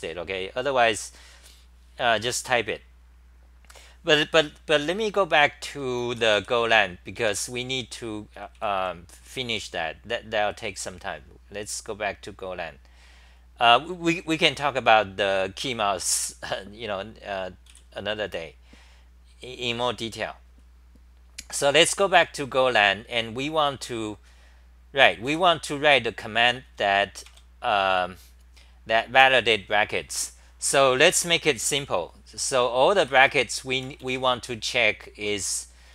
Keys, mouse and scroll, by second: 5.5-6.8 typing, 7.2 Home, 8.5 w, 8.7 Delete, 15.6 ctrl+g, 16.2 super+w, 17.7 w, 19.1-20.7 scroll down 5, 25.3 w, 26.4-27.2 typing, 30.4 typing, 33.0 Return, 33.2 Return, 35.3 Home, 35.7-35.9 typing.